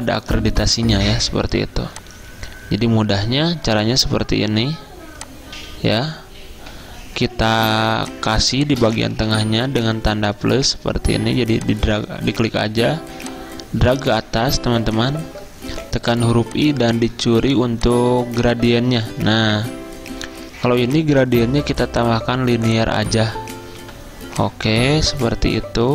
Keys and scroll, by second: 0.0 m, 6.8 a, 8.0 z, 9.6 =, 12.8 a, 15.9 i, 23.9 g.